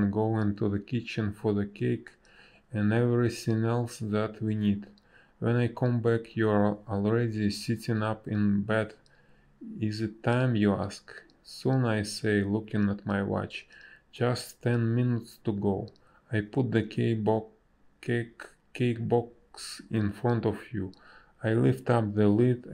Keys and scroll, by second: 3.4 ctrl+z, 4.4 space, 5.4 space, 9.1 space, 11.7 space.